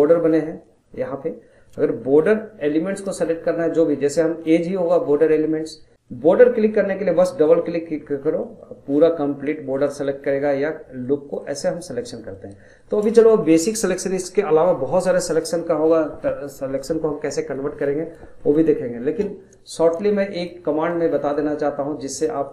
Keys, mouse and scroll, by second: 4.5 click, 5.9 scroll up 2, 6.1-7.3 middle drag, 7.3 click, 7.5 click, 8.0 scroll down 2, 8.3-9.7 middle drag, 9.7 click, 11.0 click, 11.4 click, 11.9 scroll down 1, 12.1 middle click, 12.5 scroll up 2, 12.8 shift+middle click, 13.1 scroll down 2, 13.3-16.4 middle drag, 18.1-18.4 scroll down 1, 18.4-19.7 middle drag, 19.7-22.5 drag.